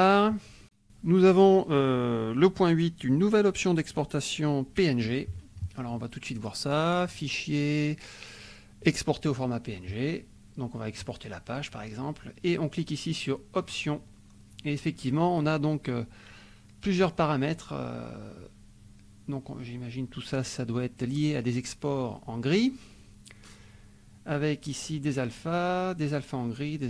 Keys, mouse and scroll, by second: 7.1 click, 8.8 click, 11.0 click, 13.6 click, 17.1-26.8 drag.